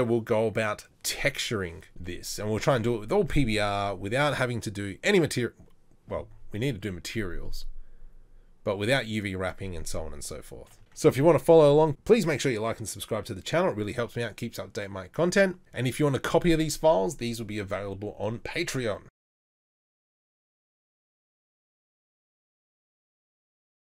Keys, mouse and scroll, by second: 10.8 ctrl+s.